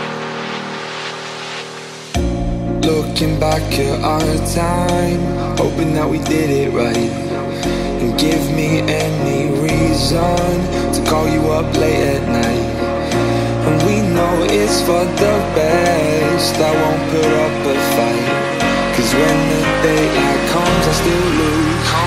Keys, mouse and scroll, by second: 0.4 click, 1.6-3.3 drag, 9.4-11.4 middle drag, 11.4-11.9 scroll up 1, 11.9 middle click, 12.6 space, 21.7 space.